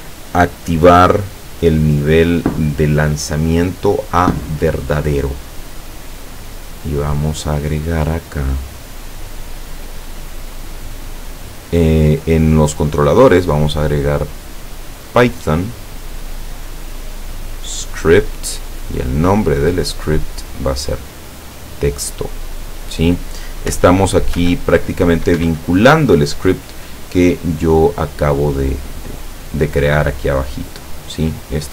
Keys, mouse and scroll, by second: 7.3-8.9 drag, 9.3 click, 13.3 click, 14.8 click, 16.7 click, 18.7 click, 20.0 click, 21.8 click, 23.8 p, 24.5 p, 25.5 Escape, 30.6-31.7 middle drag.